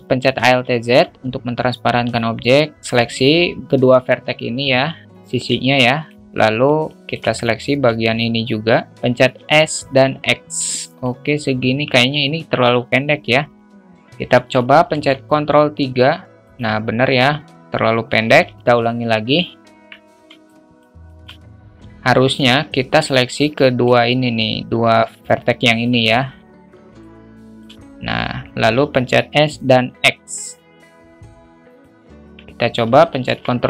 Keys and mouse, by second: 0.1 alt+z, 0.7 alt+shift+middle click, 2.0-3.2 drag, 5.1 middle click, 5.7-6.0 alt+shift+middle drag, 6.4 alt+shift+middle click, 6.8 alt+shift+middle click, 8.1 shift+click, 11.6 Tab, 12.9 alt+z, 14.9 ctrl+3, 18.5 ctrl+z, 20.5 alt+shift+middle click, 21.0 alt+shift+middle click, 22.2 alt+z, 22.9 click, 25.2 alt+shift+middle click, 25.4-25.8 alt+shift+middle drag, 26.9 shift+click, 32.2 Tab, 33.3 ctrl+3.